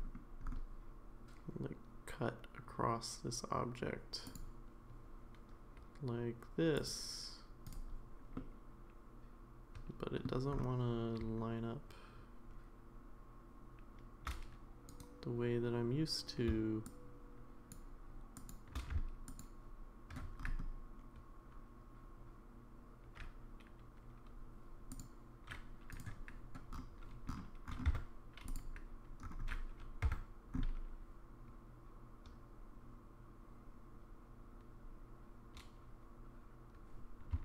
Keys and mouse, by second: 4.2-7.8 drag, 8.4-10.2 middle drag, 15.0 right click, 16.9 shift+click, 18.4 shift+click, 19.3 ctrl+click, 24.9-26.1 drag, 27.9 Tab, 28.5 click, 30.0 Tab.